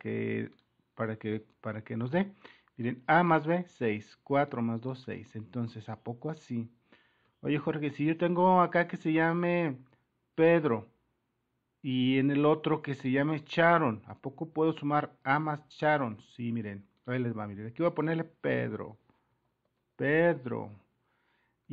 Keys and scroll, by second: 1.3 Return.